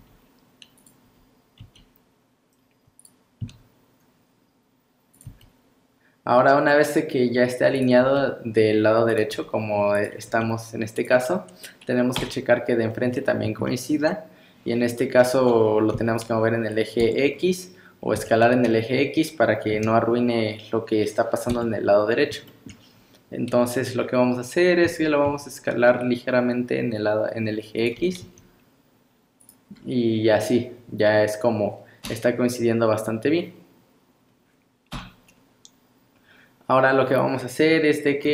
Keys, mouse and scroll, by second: 0.0 g, 1.6 r, 3.4 s, 5.3 g, 8.0 r, 9.3 g, 10.3 r, 12.2 KP_1, 13.3 scroll up 1, 13.7 shift+middle click, 15.0-15.8 scroll down 4, 16.0 g, 17.3 scroll up 3, 18.2 s, 22.0 scroll up 1, 22.5 shift+middle click, 23.0 scroll up 1, 24.9 s, 28.0 g, 29.8 scroll down 1, 31.1-32.1 scroll down 2, 32.1 KP_3, 34.3-34.9 scroll down 1, 34.9 KP_1, 36.2 scroll up 1, 38.2 scroll down 4.